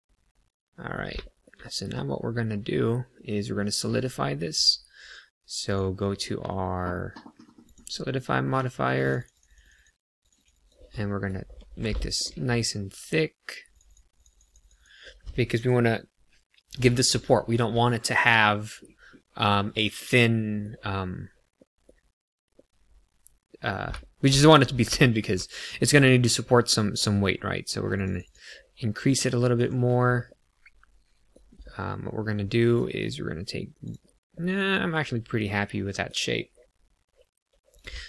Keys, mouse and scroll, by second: 1.2 shift+middle click, 1.6 middle click, 4.5 click, 5.7 click, 9.0 click, 9.2 click, 9.3 click, 9.4 click, 9.6 click, 9.7 click, 10.2 click, 10.3 click, 10.5 click, 10.9 middle click, 11.4-11.7 scroll up 2, 11.9 shift+middle click, 13.6 click, 13.9 click, 14.1 click, 14.3 click, 14.5 click, 14.8 click, 17.2 shift+middle click, 17.8 middle click, 21.5 middle click, 22.6 middle click, 24.0 shift+middle click, 24.9 middle click, 27.9 click, 28.0 click, 28.2 click, 28.7 middle click, 29.5 KP_1, 30.3 middle click, 31.6 middle click, 33.8 click, 34.3 middle click, 37.7 click, 37.9 Tab.